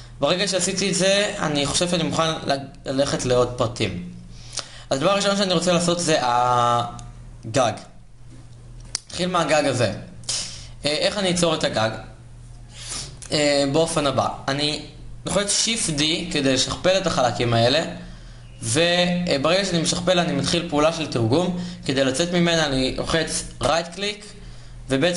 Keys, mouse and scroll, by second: 13.1 KP_1, 15.5 shift+d.